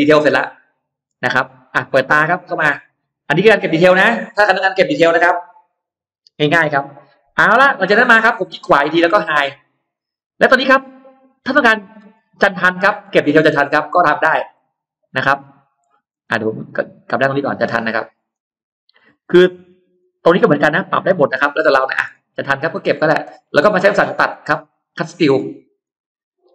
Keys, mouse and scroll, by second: 0.6 scroll down 1, 1.0 space, 2.4 click, 3.0-3.4 scroll up 1, 3.1 middle click, 3.6-4.0 scroll down 1, 5.3-5.9 scroll up 2, 6.6 middle click, 7.5 scroll up 1, 7.8 scroll down 1, 8.4 right click, 9.8 click, 10.4 middle click, 11.4-11.7 scroll down 2, 11.9-12.2 scroll up 2, 12.6 scroll down 2, 13.0 middle click, 13.0 scroll up 2, 13.8-14.2 scroll down 2, 14.3 scroll up 2, 14.9 middle click, 15.2-15.5 scroll down 2, 15.7 middle click, 17.0 click, 18.2 click, 18.5-18.8 scroll down 1, 18.8 middle click, 19.4 scroll down 1, 19.9-20.5 scroll up 2, 21.2 middle click, 21.6 scroll down 1, 22.0-23.0 middle drag, 25.6 click.